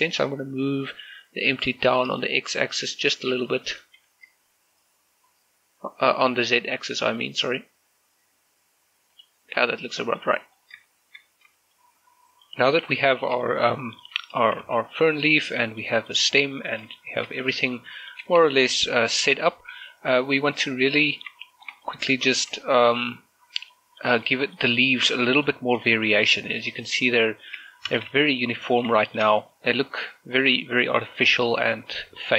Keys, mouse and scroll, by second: 1.5 g, 2.1 g, 3.3 right click, 4.0 g, 6.1 z, 9.2 click, 9.6 scroll down 1, 9.8 middle click, 10.5-10.8 scroll down 1, 10.9 shift+middle click, 13.3 middle click, 14.1 shift+middle click, 14.3 middle click, 15.4 shift+z, 16.2 shift+middle click, 16.6 middle click, 18.4 scroll up 1, 18.7 shift+middle click, 19.4 scroll down 1, 20.5-21.1 scroll up 1, 21.1-21.5 scroll down 1, 21.5 middle click, 21.9 z, 22.3 shift+middle click, 23.1 z, 23.3 shift+middle click, 25.9 scroll up 1, 26.3 middle click, 27.1 middle click, 28.7 shift+space, 28.9 scroll down 1, 29.2 middle click, 30.1 scroll up 1.